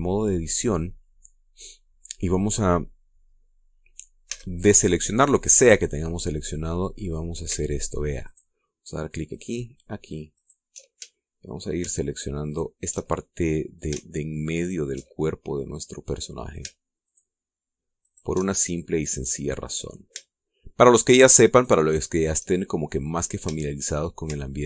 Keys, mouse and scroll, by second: 0.1-0.5 scroll up 1, 0.7 scroll down 1, 1.2-3.3 middle drag, 3.7 scroll up 1, 4.8 a, 5.3-5.8 scroll down 2, 5.9-6.3 scroll up 1, 8.8 alt+shift+right click, 9.8 alt+shift+right click, 10.9 alt+shift+right click, 11.6 alt+shift+middle click, 13.0 alt+shift+right click, 13.7 alt+shift+middle click, 15.1 alt+shift+right click, 15.8-17.0 alt+shift+middle drag, 17.5 alt+shift+right click, 18.5 alt+shift+right click, 19.0-20.1 alt+shift+middle drag, 20.2-20.8 scroll up 2, 20.8-21.9 shift+middle drag, 22.0 shift+right click, 23.0 shift+scroll down 2, 23.3 shift+middle click, 24.1 shift+middle click.